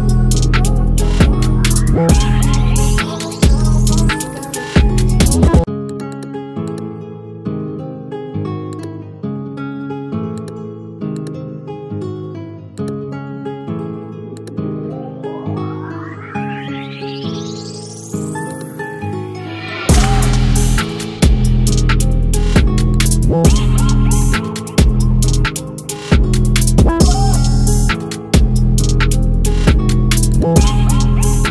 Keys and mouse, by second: 23.4 click, 25.5-26.7 drag.